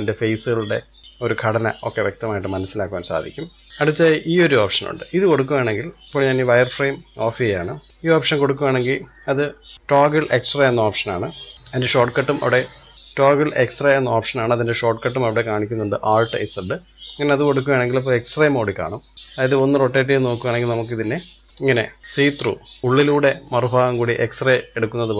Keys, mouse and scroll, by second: 2.8-3.7 drag, 6.3-8.4 drag, 17.0-19.1 drag, 19.1-21.0 middle drag, 21.0-21.5 scroll up 4, 21.5 scroll down 3, 21.7-24.1 middle drag.